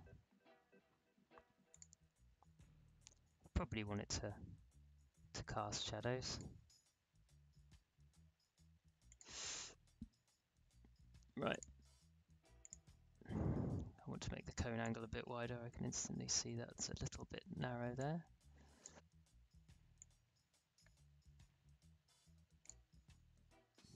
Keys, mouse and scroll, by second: 1.7 click, 5.7-9.0 drag, 11.5 click, 14.8-23.9 drag.